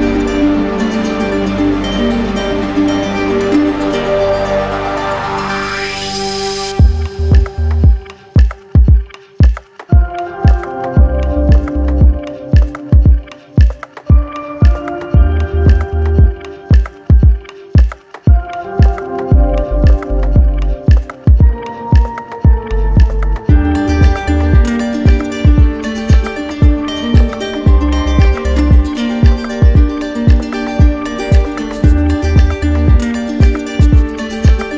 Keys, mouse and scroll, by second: 0.5 right click, 8.5 right click, 20.4 right click, 20.4 shift+click, 22.0 z, 23.5 click, 25.7 click, 25.9 ctrl+z, 28.2 click, 28.4 ctrl+z, 30.7 click.